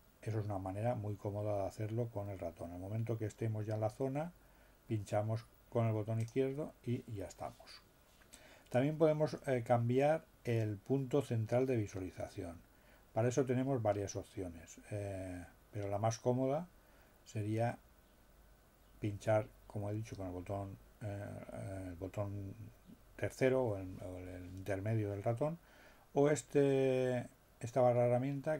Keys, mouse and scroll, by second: 6.2 click.